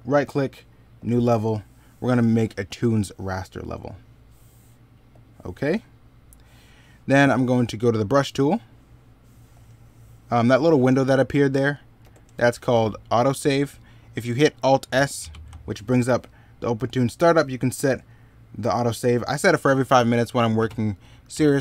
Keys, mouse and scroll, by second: 5.6 middle click, 11.8 ctrl+z.